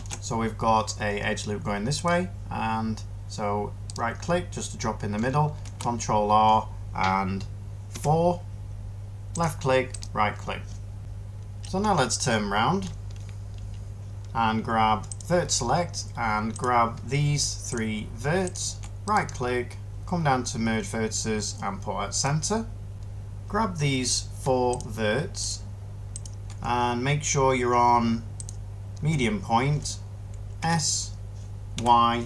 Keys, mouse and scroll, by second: 5.5 ctrl+r, 7.8 4, 30.5 s, 31.6 y.